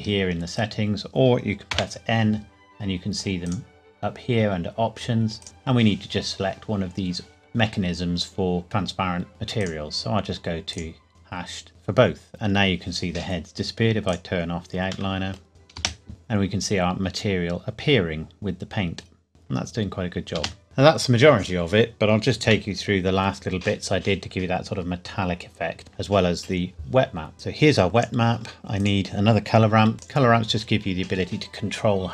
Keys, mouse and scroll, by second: 0.3 scroll down 1, 1.7 n, 3.4 click, 9.6 click, 14.1 click, 15.1 middle click, 15.5 click, 15.8 space, 16.1 middle click, 20.4 space, 20.6 click, 24.4-24.9 scroll down 1, 27.0-27.3 scroll up 1, 27.7 click, 28.4-28.8 scroll down 1, 28.8 click, 29.9 shift+d, 30.4-31.1 scroll up 1.